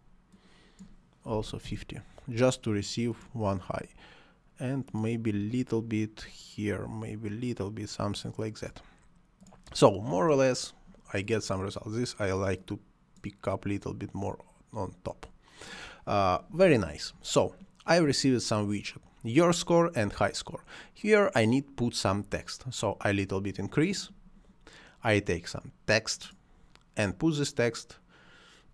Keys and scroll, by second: 1.3 5, 1.4 0, 1.7 Return.